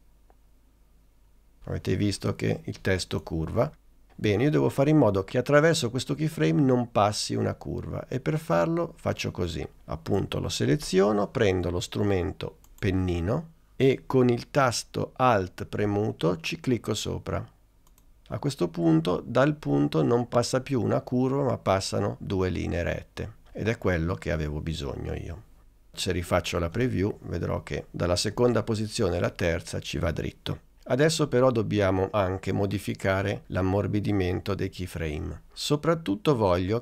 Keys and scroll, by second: 26.8 space, 32.3 space.